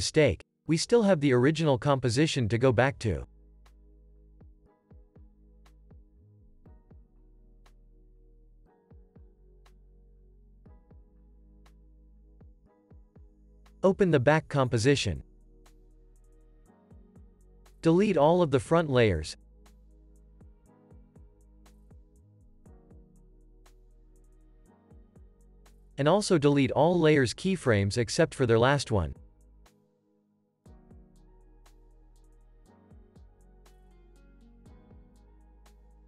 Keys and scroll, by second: 0.1 Down, 0.6 Return, 2.3 Right, 2.7 BackSpace, 4.7-5.9 typing, 7.5 Return, 9.8-11.3 typing, 12.1 super+s, 19.3 Delete, 20.8 Delete, 24.0 Delete, 25.9 super+a, 27.2 u, 33.6 Delete, 34.9 Delete.